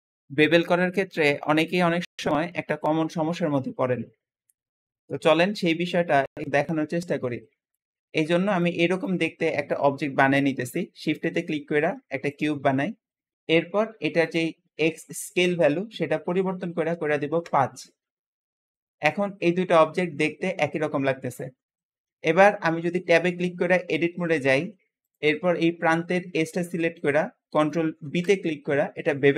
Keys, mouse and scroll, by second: 0.1 shift+middle click, 8.4 `, 8.6 `, 9.7 Escape, 10.6 shift+a, 10.8 shift+a, 14.1-17.3 drag, 16.8 5, 16.8 5, 17.3 Return, 17.4 Return, 21.6-23.1 shift+middle drag, 23.1 Tab, 24.9 click, 26.4 scroll up 1, 26.8-27.9 shift+middle drag, 27.9 ctrl+b, 27.9 ctrl+b.